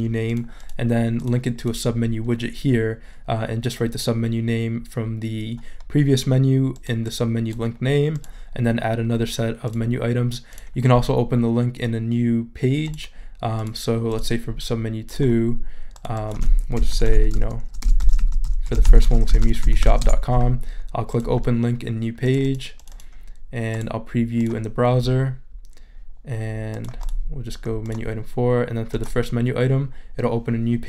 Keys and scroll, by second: 16.5-20.3 typing.